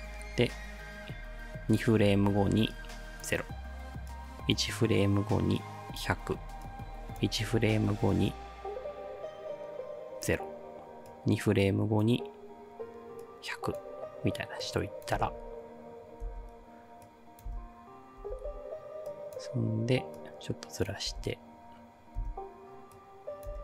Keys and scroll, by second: 15.2 space, 16.3 space, 17.5 space, 21.1 space, 22.2 space, 23.5 space.